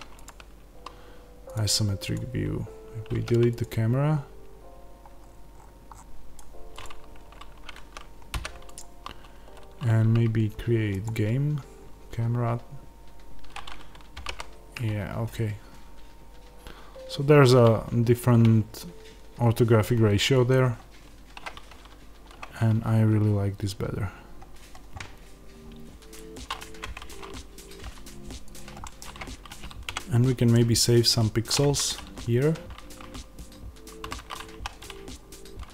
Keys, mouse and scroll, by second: 0.4 click, 2.0 click, 4.3 x, 6.0 click, 8.7 x, 11.0-20.4 drag, 14.1 g, 22.3 scroll, 28.5 click, 28.7-35.0 middle drag, 29.8 KP_Decimal, 30.4 scroll up 2, 31.5 Tab, 32.7 a, 34.3 1, 35.0 click.